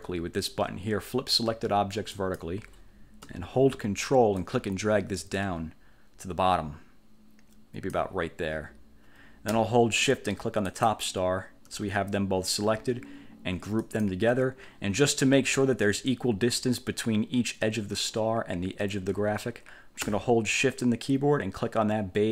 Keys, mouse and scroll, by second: 2.3 click, 4.5-8.2 ctrl+drag, 10.7 shift+click, 13.9 click.